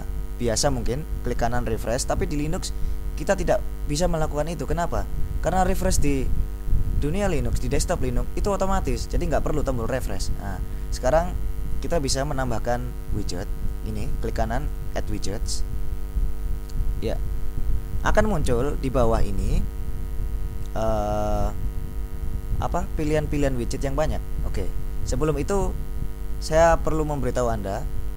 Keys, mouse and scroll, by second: 14.9 click, 23.2-24.5 scroll down 2, 25.3-26.4 drag, 27.7 click.